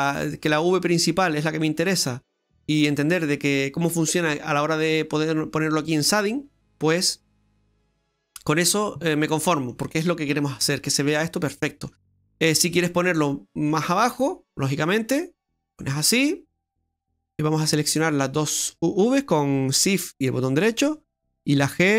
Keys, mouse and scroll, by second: 0.5 click, 1.1 click, 2.9 click, 4.9 click, 5.6-6.0 scroll up 1, 6.1 middle click, 6.7 click, 8.8-9.3 scroll down 1, 9.3 middle click, 10.6 middle click, 11.5 middle click, 12.0 middle click, 13.8 click, 15.2 middle click, 16.0-16.7 scroll up 5, 18.4 shift+right click, 21.6 g.